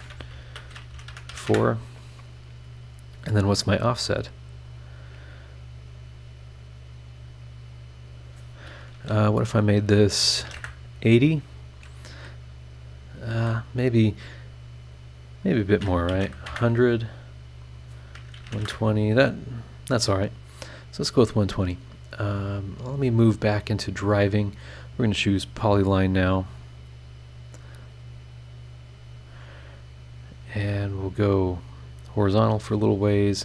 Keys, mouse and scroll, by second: 0.0-1.3 typing, 1.5 KP_Enter, 4.6 click, 7.6 click, 10.4 KP_8, 10.4 KP_0, 10.6 KP_Enter, 13.3 Escape, 15.0 click, 15.3 click, 16.1 KP_1, 16.2 KP_0, 16.5 KP_Enter, 17.6 click, 18.4 KP_1, 18.4 KP_2, 18.5 KP_0, 18.6 KP_Enter, 23.0 click, 24.8 click, 25.4-25.7 scroll up 1, 27.6 click, 28.2 click, 31.7 click.